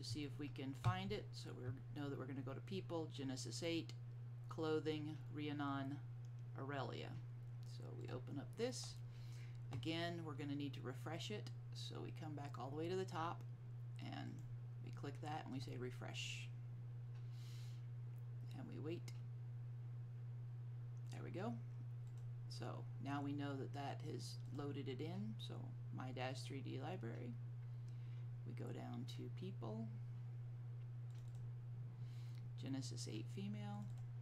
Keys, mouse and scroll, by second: 8.1 click, 11.6 middle click, 14.4 click, 22.2 click, 24.6 click, 26.7-29.3 scroll down 1, 29.8-30.9 scroll up 1, 31.2 click, 32.5-33.7 scroll down 1, 33.9 click.